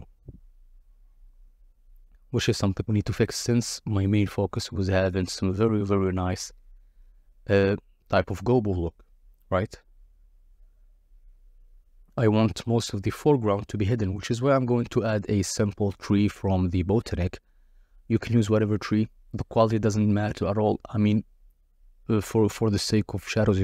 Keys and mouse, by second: 1.9 click, 3.1 middle click, 3.6 click, 4.2 middle click, 5.0 KP_0, 6.0 click, 6.5-7.2 drag, 7.4 click, 7.9 click, 8.3 middle click, 8.6 middle click, 9.5 click, 10.0 click, 11.4 click, 11.9 click, 13.8-14.2 drag, 14.4 click, 15.8-18.2 typing, 19.8 middle click, 20.7 s, 21.9 g, 22.0 shift+z, 22.8 click, 23.2 alt+d, 23.4 shift+z.